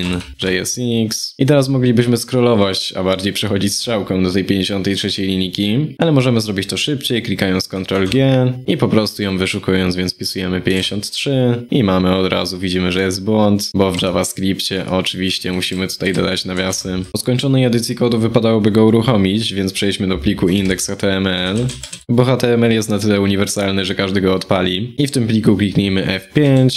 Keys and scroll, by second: 7.6 ctrl+g, 14.6 ctrl+Right, 14.7 ctrl+Right, 15.3 ctrl+Left, 16.9 ctrl+Right, 20.2 ctrl+p.